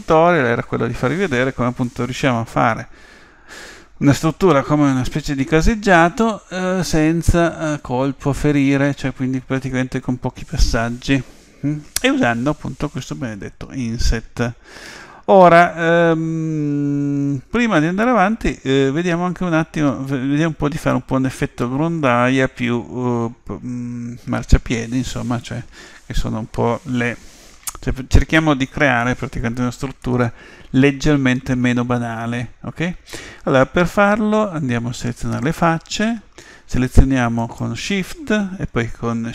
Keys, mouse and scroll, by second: 1.9-3.6 middle drag, 30.0-32.0 middle drag, 35.4 click, 37.4-39.3 right drag.